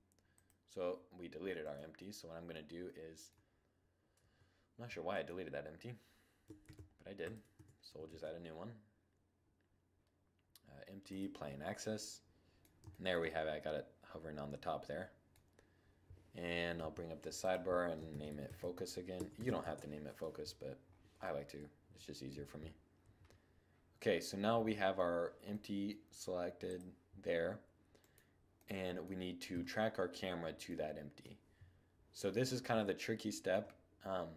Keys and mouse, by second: 0.8-2.8 middle drag, 3.4 Tab, 5.9 shift+s, 6.8 Tab, 7.3 shift+a, 16.0 n, 20.2 middle click, 20.6-22.3 middle drag, 24.7-26.4 middle drag, 26.4-27.8 drag, 27.2 right click, 27.8-29.4 middle drag, 28.7 KP_7, 29.6-30.1 middle drag, 31.6-34.3 middle drag.